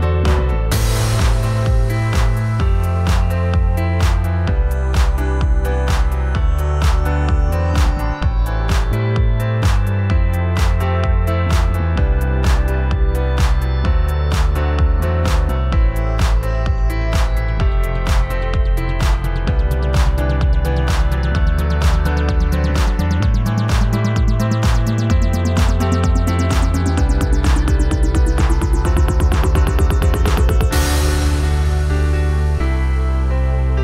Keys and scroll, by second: 5.5 a, 9.0-11.0 typing, 11.8 ctrl+z, 24.5 ctrl+shift+], 25.6 t, 29.2 v, 32.3 v.